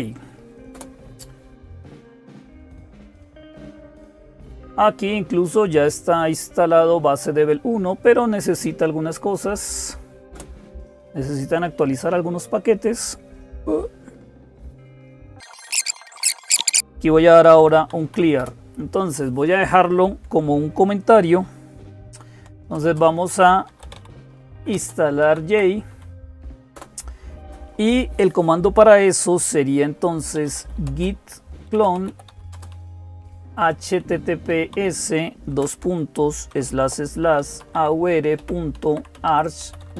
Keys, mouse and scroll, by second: 0.0-39.9 typing, 0.5 Return, 10.1 Return, 16.8 Down.